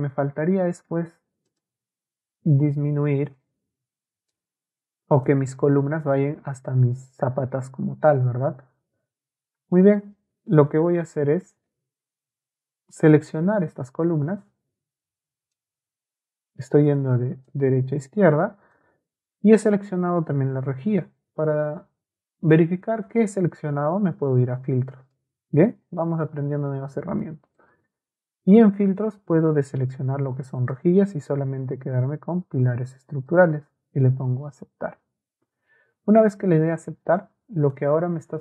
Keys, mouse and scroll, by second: 0.1 middle click, 1.5-3.4 middle drag, 3.4 Escape, 3.7 Escape, 4.3 click, 5.7 Escape, 13.0 click, 14.0-15.5 drag, 16.9 click, 17.5-18.7 drag, 22.4 ctrl+a, 24.3 ctrl+click, 26.7 Escape, 27.5 click, 30.6-34.1 right drag.